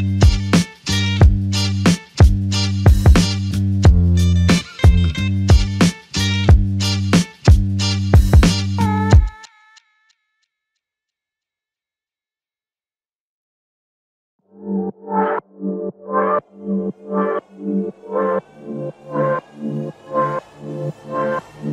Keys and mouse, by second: 3.6 alt+click, 5.8 alt+shift+click, 8.6 double click, 10.4 shift+click, 13.9 shift+click, 16.9 double click, 20.4 shift+click, 20.6 shift+double click, 21.0 shift+click.